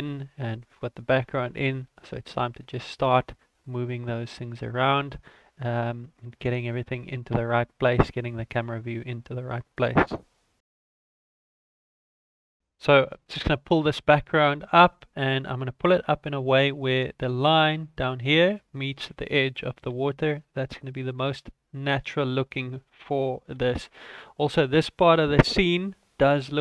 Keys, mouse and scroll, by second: 12.5 right click, 13.3 g, 19.5 g, 24.7 ctrl+s.